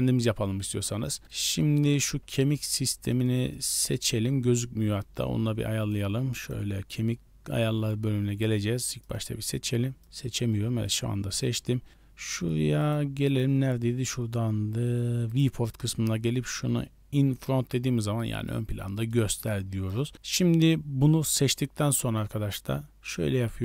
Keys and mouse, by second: 6.1 click, 9.0-10.0 right drag, 12.8 click, 13.2 click, 15.2 click, 17.3 click, 18.1-18.5 middle drag, 18.9 shift+middle drag, 19.3 middle drag, 22.4-22.9 middle drag.